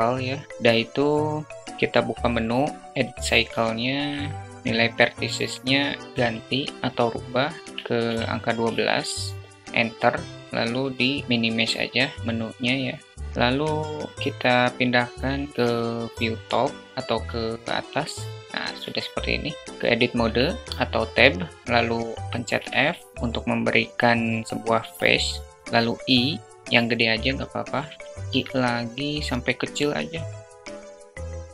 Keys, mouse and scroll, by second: 1.6 click, 4.6-8.3 drag, 10.4 click, 19.4 Tab, 28.5 i, 30.8 i.